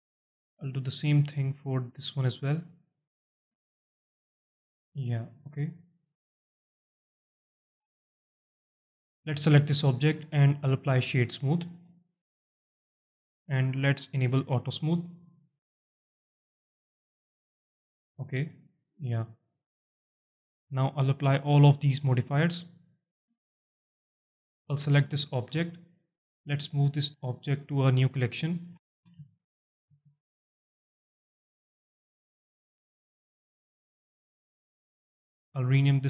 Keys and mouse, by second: 0.4 click, 0.6 alt+click, 1.4 alt+click, 2.3 click, 3.1-4.2 drag, 4.6-6.3 alt+drag, 6.5 Tab, 7.1 alt+shift+drag, 7.5 alt+click, 10.2-11.7 drag, 11.9 alt+shift+drag, 12.4 alt+click, 13.7 click, 15.8 click, 17.4 click, 18.6-19.1 alt+drag, 19.4 click, 20.5 click, 21.4 click, 22.2 click, 23.1 click, 23.6-24.0 alt+drag, 24.7 click, 25.2 alt+shift+drag, 26.4-29.8 drag, 32.1 click, 34.0-34.9 drag, 35.3 click.